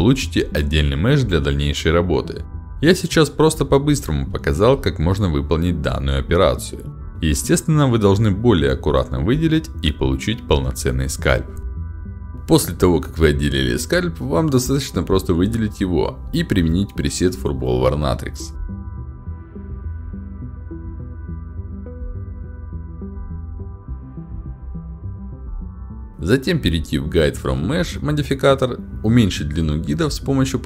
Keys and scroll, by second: 0.0 q, 0.9 q, 2.7 w, 4.9 ctrl+h, 6.2 q.